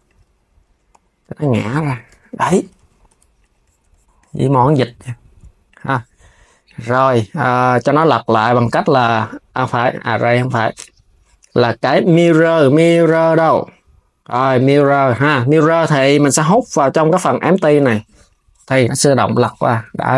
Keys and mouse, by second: 1.0 r, 1.7 KP_3, 2.3 s, 2.7 Tab, 3.0 click, 4.4 s, 5.3 click, 6.3-9.3 drag, 9.9-13.5 drag, 16.2 click, 17.9 click, 18.8 s, 19.9 KP_3.